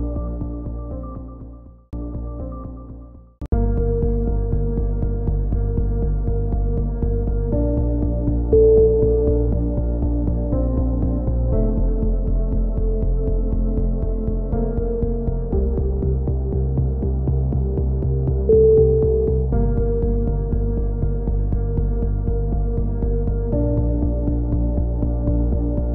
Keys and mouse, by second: 0.8 right click, 1.3 click, 5.5 middle click, 6.0-8.9 drag, 10.2-13.8 drag, 14.2 a, 14.2-16.5 middle drag, 16.7-19.9 middle drag, 19.9 click, 20.2 middle click, 20.8 click, 21.9-24.4 typing, 22.2-23.8 middle drag.